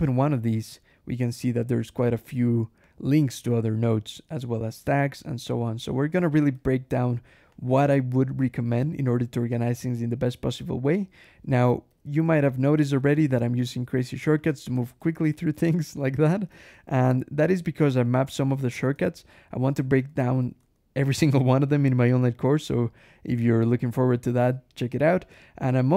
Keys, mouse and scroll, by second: 0.7 scroll down 1, 1.9 scroll down 1, 2.7 click, 4.0 scroll up 1, 5.2-5.6 scroll down 1, 6.4 alt+h, 7.4 click, 7.7 Escape, 8.7 g, 9.1 Escape, 9.8 j, 11.3 alt+Escape, 11.7 alt+g, 13.0 alt+shift+Escape, 13.1 alt+shift+j, 14.3 shift+g, 14.6 shift+Escape, 15.0 ctrl+shift+h, 15.2 ctrl+shift+l, 15.5 ctrl+shift+h, 15.8 ctrl+shift+l, 16.6 Escape, 18.8 Escape, 19.5 click, 19.8 Escape, 20.1 g, 20.5 Escape, 20.9 j, 23.6 k, 24.9 j.